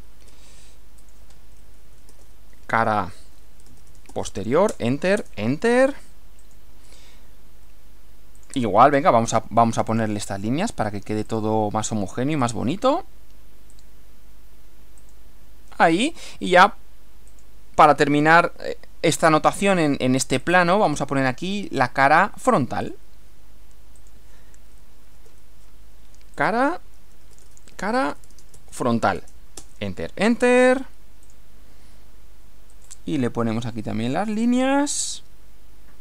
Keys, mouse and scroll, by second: 0.1 shift+c, 1.0 click, 1.6-4.6 typing, 4.7 Return, 6.4 click, 8.4 click, 9.9 click, 11.2 click, 12.4 click, 13.7 click, 15.0 click, 17.3 click, 20.4 click, 22.8 click, 24.0 click, 25.2 shift+c, 26.4 click, 27.0-29.1 typing, 29.2 Return, 31.2 click, 32.8 click, 34.4 click.